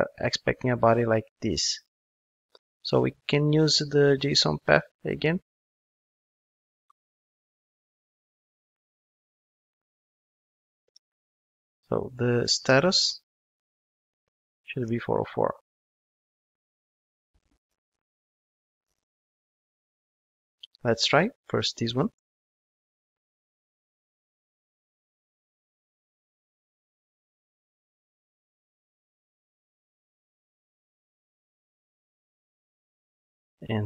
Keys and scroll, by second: 2.2 super+x, 6.6 super+c, 8.7 super+v, 22.2 ctrl+shift+d.